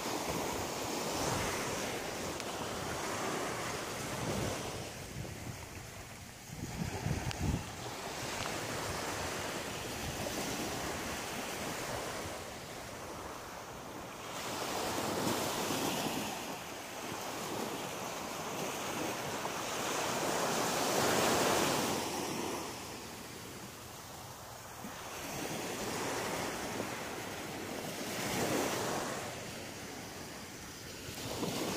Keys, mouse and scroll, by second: 0.0 click, 0.8 click, 1.4 right click, 1.9 shift+right click, 2.5 right click, 3.8 shift+right click, 4.3 shift+right click, 5.0 shift+right click, 5.6 shift+right click, 6.1 shift+right click, 6.5 shift+right click, 11.8 middle click, 13.6-14.2 scroll down 4, 14.7 middle click, 18.9 click, 20.5 middle click, 22.5 scroll up 2, 24.3 click, 24.9 right click, 26.0 g, 27.2 click, 28.6 shift+right click, 29.1 shift+right click, 30.1 shift+right click, 31.2 f, 31.6 scroll up 1.